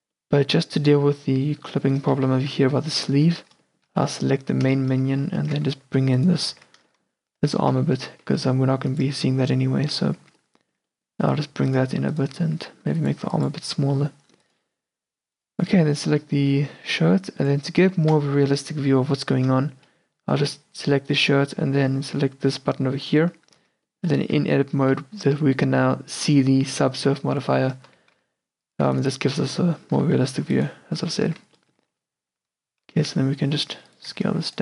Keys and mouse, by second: 0.0 Tab, 4.4 Tab, 5.6 z, 6.6 z, 7.5 g, 9.2 Tab, 10.3 Tab, 11.3-13.8 middle drag, 11.3 a, 12.5 s, 13.2 g, 13.8 Tab, 14.1 middle click, 15.8-16.4 middle drag, 17.5-19.4 middle drag, 23.7 Tab, 27.9 z, 28.3 c, 30.0 c, 31.4 z, 32.4 g, 34.2 a.